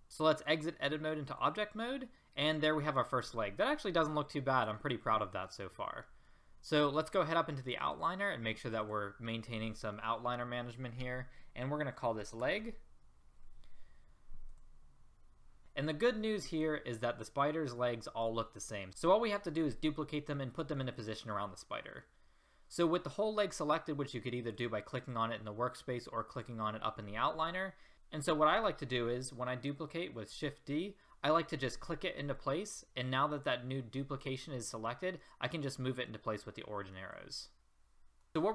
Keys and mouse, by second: 0.8 click, 4.5-6.6 middle drag, 7.6-14.5 middle drag, 25.1-27.9 right drag, 30.3 shift+d, 35.0-36.2 middle drag, 36.3-37.4 middle drag, 37.4 click, 37.5-38.5 middle drag.